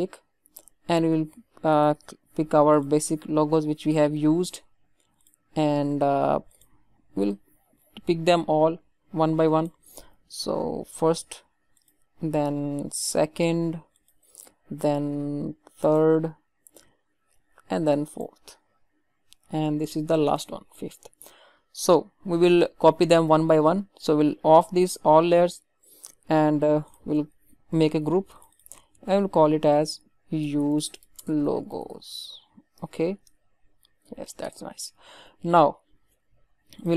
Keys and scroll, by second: 27.7 ctrl+g, 34.4 Return.